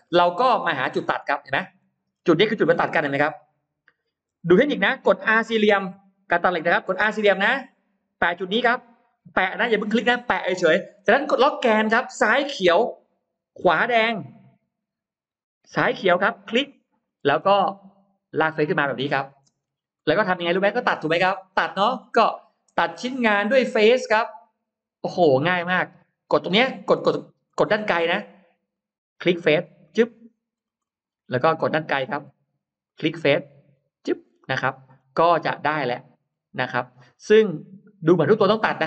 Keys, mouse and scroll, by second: 0.7 scroll up 2, 1.1 middle click, 13.0 Left, 14.2 Right, 15.6 Left, 16.5 click, 16.9-17.7 scroll down 2, 18.6 click, 19.4-19.8 scroll down 1, 19.4 space, 20.2-20.8 scroll up 2, 23.2 click, 24.9 click, 27.4 middle click, 28.6 click, 29.7 click, 30.4-30.8 scroll up 1, 30.9 scroll down 1, 31.6-32.4 scroll up 4, 32.7 click, 33.6 click, 34.0-34.4 scroll down 2, 35.3 middle click, 36.0-37.4 scroll down 3, 37.4 middle click, 38.4 middle click.